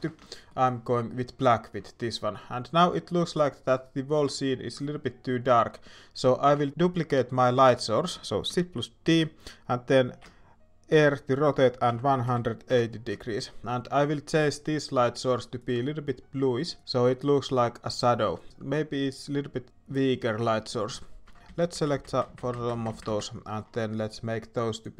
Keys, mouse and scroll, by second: 0.0 alt+a, 0.2 shift+middle drag, 1.8 shift+middle drag, 2.9 shift+middle drag, 7.2 shift+middle drag, 21.4 Tab, 21.4 alt+a, 21.4-23.4 l, 23.4 middle click.